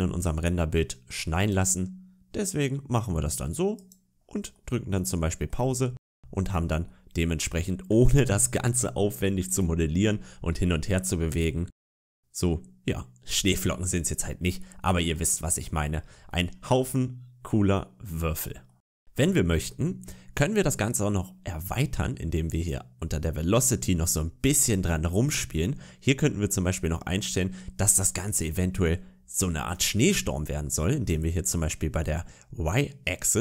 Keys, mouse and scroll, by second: 0.0 scroll up 1, 0.3 middle click, 1.2 click, 3.7 click, 4.4 middle click, 5.6 shift+middle click, 6.4-6.7 scroll up 2, 6.7 middle click, 10.2-10.6 scroll down 2, 10.6 shift+middle click, 11.0-11.4 scroll up 1, 11.4 middle click, 15.2-15.8 scroll down 2, 15.8 scroll up 2, 16.1 middle click, 22.4 click, 27.6-28.1 scroll down 2, 27.9 middle click, 28.5 shift+middle click.